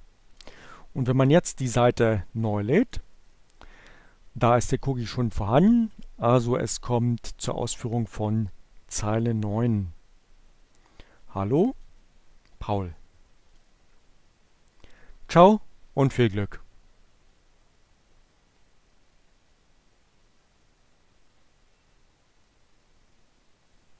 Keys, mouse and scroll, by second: 1.9 click, 5.1 scroll down 2, 11.3 scroll down 2, 11.3 click, 13.1 click.